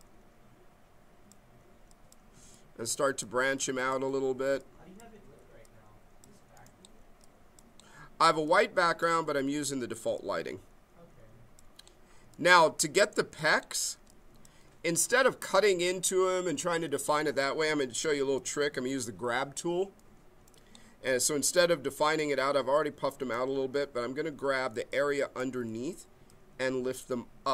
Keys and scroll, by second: 24.7 b.